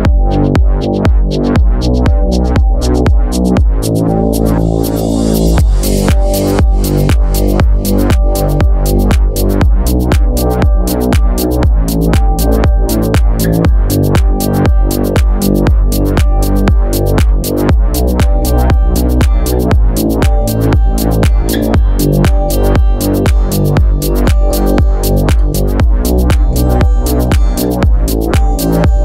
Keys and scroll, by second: 0.0 Return, 0.7 super+s, 4.2-6.9 typing, 12.3 super+c, 12.4 super+v, 17.2 super+c, 17.3 super+v, 18.7 Right, 19.2 Left, 19.3 Right, 20.0 Right, 20.3 Down, 20.4 Right, 20.5 Down, 20.6 Left, 23.2 Down, 24.4 super+s.